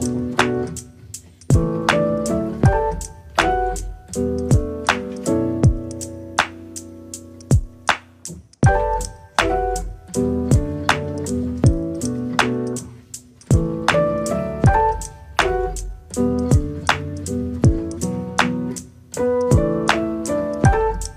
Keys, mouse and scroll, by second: 1.5 middle click, 2.2 click, 2.8 click, 3.5 KP_0, 4.7 click, 5.2 click, 5.8 KP_0, 6.9 KP_0, 8.1-9.3 middle drag, 10.6 middle click, 10.7-11.2 scroll down 1, 11.2-12.7 shift+middle drag, 12.7 click, 13.4 r, 15.4 r, 16.9 click, 17.7 click, 20.1 click, 20.8 click.